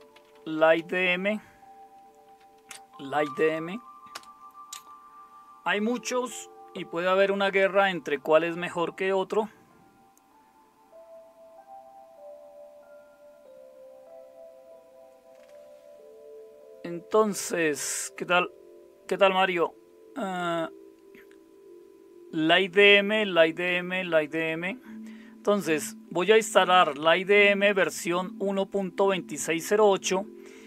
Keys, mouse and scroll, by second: 0.0-4.6 typing.